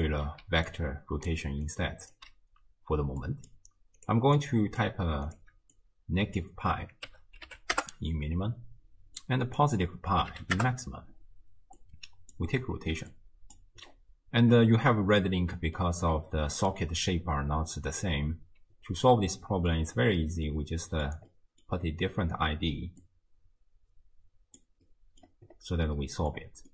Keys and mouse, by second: 0.4-1.7 d, 0.7 click, 2.2 d, 2.2 d, 3.2 click, 4.5 click, 6.0-7.8 drag, 9.2-10.6 drag, 12.0 click, 13.1-13.6 drag, 15.6 middle click, 16.6 middle click, 16.9-18.5 d, 19.4 click, 20.5 middle click, 21.4 middle click, 23.1-24.7 drag, 25.1 click, 26.1 click.